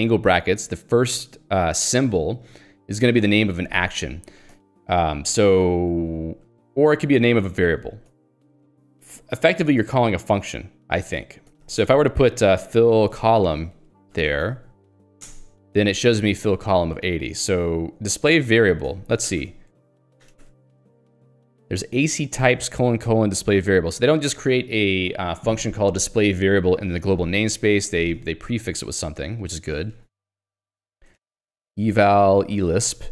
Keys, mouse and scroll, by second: 4.5 click, 5.1 j, 5.5 k, 7.9 click, 8.1 Escape, 11.4-15.0 typing, 15.3 alt+Return, 16.5 Escape, 18.8 click, 18.9 Escape, 19.5-21.5 typing, 29.8 BackSpace, 31.4-33.1 typing.